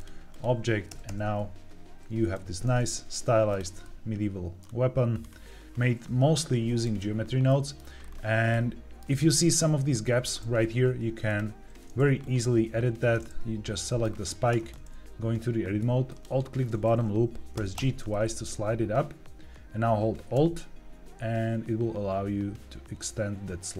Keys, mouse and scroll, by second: 0.8 r, 1.5 r, 2.2 Escape, 3.4 click, 3.7-4.5 middle drag, 4.6 scroll down 1, 5.1-5.6 scroll up 2, 5.6 middle click, 7.4 middle click, 7.9-8.4 scroll up 4, 8.4-10.0 middle drag, 11.4 click, 12.1 click, 13.6 middle click, 14.0 scroll down 1, 14.4 Tab, 16.0 alt+click, 17.5 g, 17.7 g.